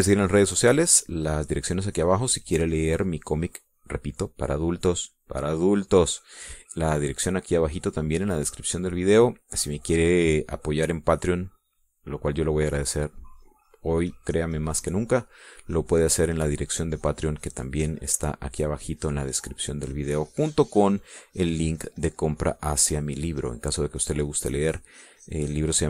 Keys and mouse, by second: 14.0-16.8 drag, 17.3-20.1 drag, 20.3-21.5 drag, 21.7-22.7 drag, 23.1-25.8 drag.